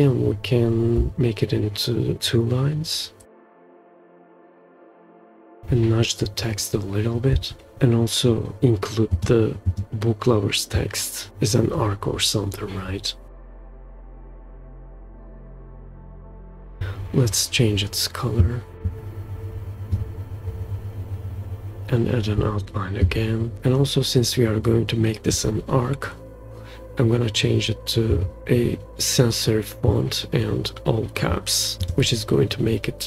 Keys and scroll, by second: 1.1 Return, 7.3-7.7 shift+scroll down 2, 15.4 super+v.